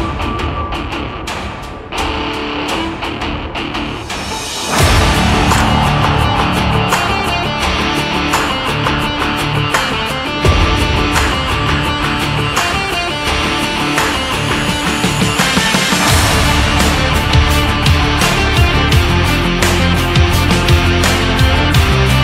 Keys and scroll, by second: 13.3 ctrl+Right, 21.9 ctrl+Down.